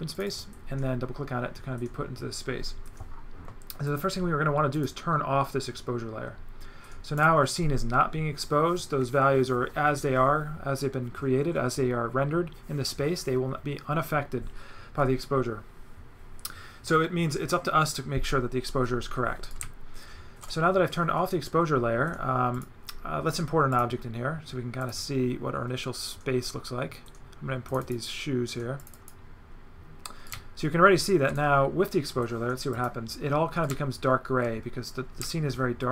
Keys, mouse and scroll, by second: 0.1 click, 3.9 click, 4.7 click, 7.2 click, 19.5 right click, 22.5 click, 23.7 click, 24.8 click, 27.7 click, 28.8 click, 30.3 right click, 32.7 click, 33.6 right click.